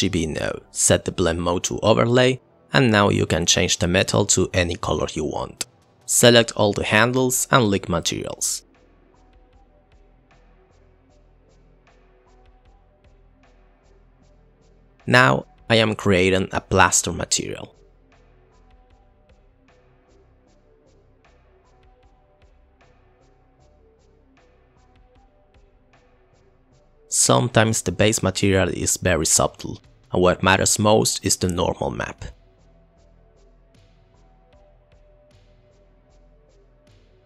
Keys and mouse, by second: 0.2-0.6 drag, 1.1 click, 1.8 click, 2.8-3.2 drag, 4.0-6.5 drag, 6.6 middle click, 7.5 middle click, 7.6 shift+click, 8.0 shift+drag, 8.5 shift+click, 8.7 ctrl+l, 9.0 middle click, 9.8 KP_0, 15.9-17.5 drag, 21.0 click, 21.9 click, 22.9 ctrl+a, 23.5 click, 24.0 click, 24.3 click, 24.7 click, 28.0 ctrl+t, 28.2 click, 29.0 click, 29.6 click, 30.1 click, 30.3 Delete, 31.6 click, 31.9 click, 35.0 click, 35.4 click, 36.2 shift+a, 36.5 click, 36.6 click, 37.1 click.